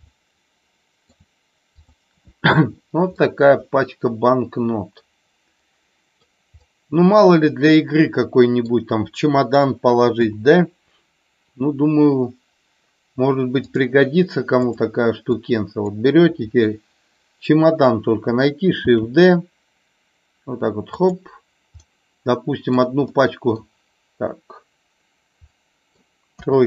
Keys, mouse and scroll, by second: 0.1-1.2 middle drag, 3.1-6.2 middle drag, 6.7-8.7 middle drag, 10.2 KP_7, 14.7 click, 15.4 click, 18.8 shift+d, 20.9 click, 21.8-22.8 middle drag, 23.1 middle click, 25.6 middle click, 26.4 KP_3.